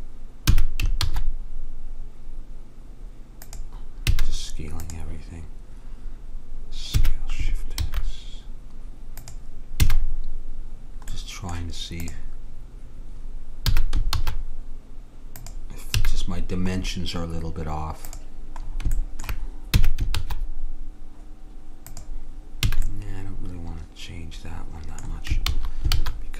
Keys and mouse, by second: 0.6 s, 4.2 a, 4.9-7.0 drag, 7.0 s, 9.9 a, 10.2-12.0 middle drag, 12.0-13.8 drag, 13.7 s, 16.0 a, 17.0-18.2 middle drag, 18.2-19.9 drag, 19.9 s, 22.7 a, 24.9 middle click, 25.5 ctrl+z, 26.0 ctrl+z.